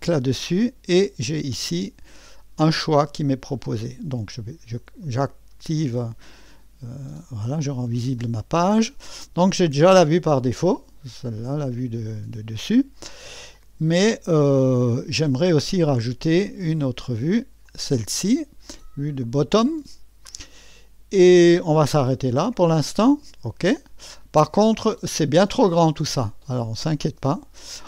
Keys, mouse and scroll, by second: 5.0 click, 6.8-7.6 scroll down 2, 7.6-8.4 scroll down 1, 10.6-13.5 scroll down 2, 13.5-15.3 middle drag, 17.6 click, 23.7 click.